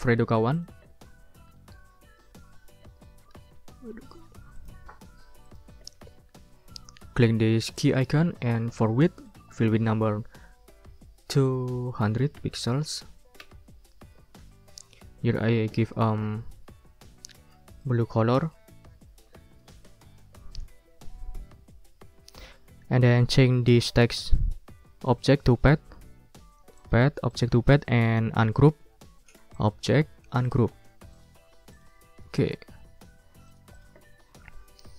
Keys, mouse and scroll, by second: 0.5 ctrl+click, 0.8 ctrl+a, 1.2-2.7 typing, 4.6 click, 5.4 click, 7.8 click, 9.3 ctrl+click, 9.7 ctrl+a, 11.3 2, 12.2 0, 13.4 Return, 14.3 ctrl+scroll up 2, 15.3 ctrl+shift+w, 17.8 click, 18.3 click, 19.0 ctrl+scroll up 2, 19.3 ctrl+click, 26.8 click, 27.5 click, 29.6 click, 30.4 click, 31.1 click, 31.7 click, 32.3 click, 33.5 click.